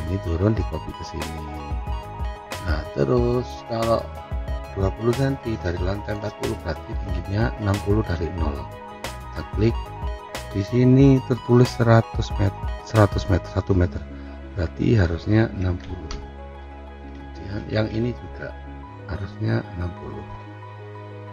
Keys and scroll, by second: 15.6 6, 15.9 0, 16.8 Return, 20.9 6.